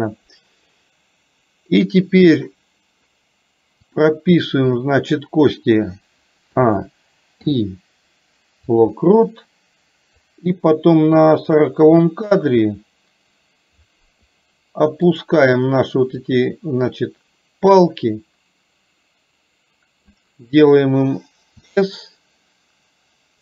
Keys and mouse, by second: 4.8 middle click, 10.3-11.6 drag, 16.3-20.3 drag.